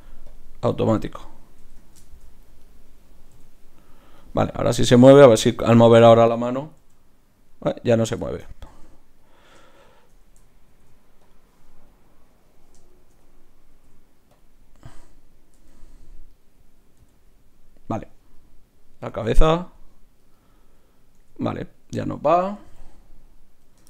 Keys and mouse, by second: 1.2-4.5 drag, 1.6 Tab, 2.0-4.3 right drag, 3.4 r, 5.8-7.5 right drag, 7.5 g, 8.7 Tab, 9.2-10.7 right drag, 10.7 ctrl+p, 13.7 ctrl+p, 15.5 Tab, 17.0 g, 19.2 r, 21.2 r, 22.6 r.